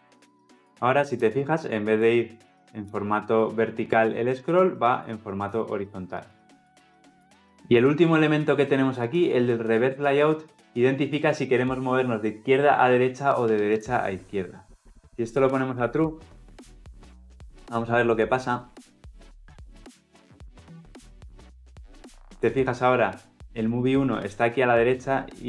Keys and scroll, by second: 18.2 ctrl+F10.